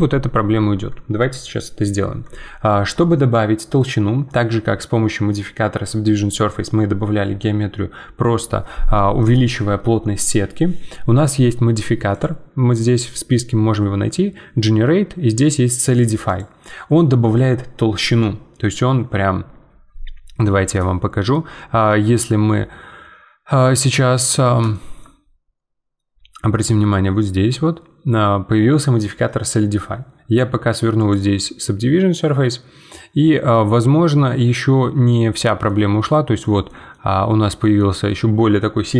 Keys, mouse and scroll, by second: 12.1-20.7 drag, 20.7-23.7 middle drag, 24.7-27.7 shift+middle drag, 31.0-33.2 drag, 33.2-38.9 middle drag.